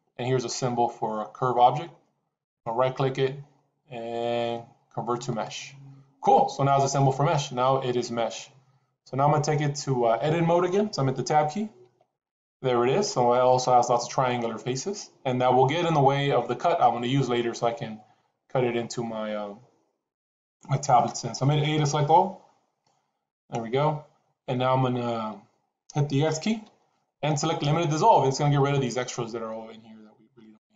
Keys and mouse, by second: 2.3-5.4 right drag, 11.7 Tab, 22.2 a, 26.4 x, 30.4 x.